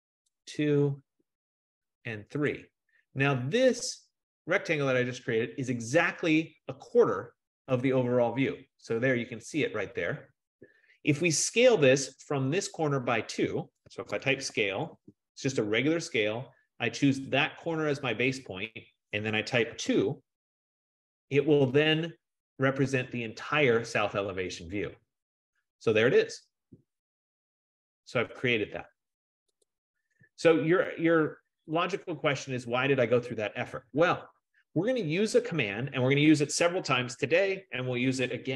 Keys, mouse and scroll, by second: 2.9 click, 13.8-15.6 typing, 17.8-18.5 typing, 18.5 click, 19.7-20.5 typing, 22.7-23.4 typing, 23.3 click, 29.9 click, 31.9 click, 32.6 click, 35.0 F15, 35.7-37.2 drag, 38.2 F15.